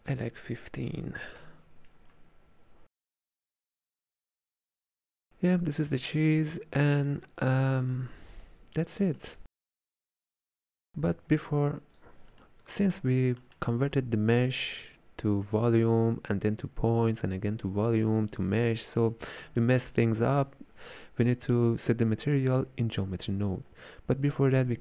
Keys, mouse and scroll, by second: 0.5-3.1 drag, 4.0-10.8 ctrl+middle drag, 10.8-11.5 scroll up 3, 12.0 click, 12.4 middle click, 13.0-13.3 scroll down 1, 13.3-16.4 middle drag, 18.1-19.5 middle drag, 19.5-20.0 scroll up 2, 20.0 click.